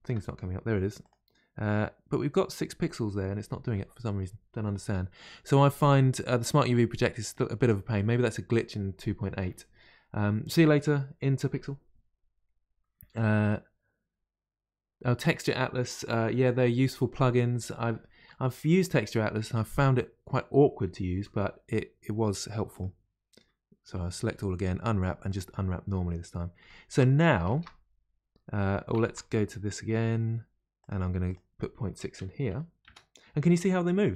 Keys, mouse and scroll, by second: 0.0 ctrl+space, 29.0 ctrl+space.